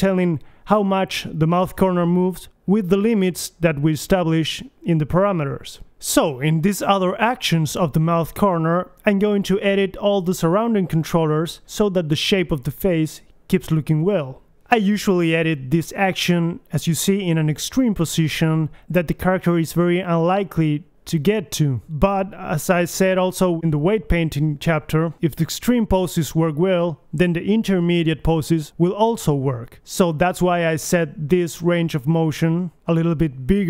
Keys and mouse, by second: 2.3 g, 3.6 click, 4.6 click, 4.7-6.2 middle drag, 7.2 click, 7.6 middle click, 8.3 g, 9.4 click, 9.9 click, 10.0 middle click, 10.3 click, 10.7 KP_1, 12.0 click, 12.7 middle click, 13.7 middle click, 14.6-15.9 drag, 14.9 g, 17.0 right click, 17.2 g, 18.7-19.7 middle drag, 21.1 middle click, 21.5 KP_1, 22.2 middle click, 24.2-25.6 middle drag, 24.9 g, 26.5 g, 28.7 KP_1, 28.9 a, 33.4-33.6 middle drag.